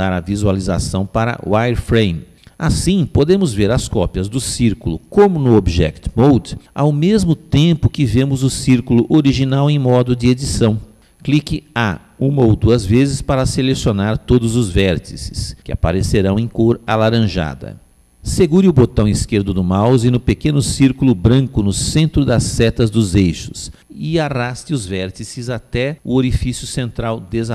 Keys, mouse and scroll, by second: 12.7-14.6 middle drag, 15.1 a, 15.9 a, 23.2 click.